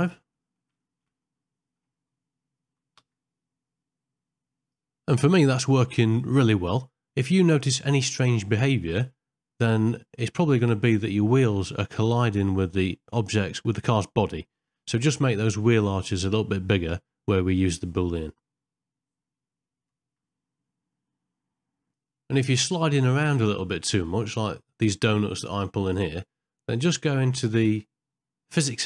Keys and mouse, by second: 0.4 ctrl+middle click, 0.8 shift+middle click, 1.3 middle click, 3.1 g, 11.5 ctrl+middle click, 11.9 shift+middle click, 13.3 shift+middle click, 13.9 ctrl+middle click, 14.3-15.4 middle drag.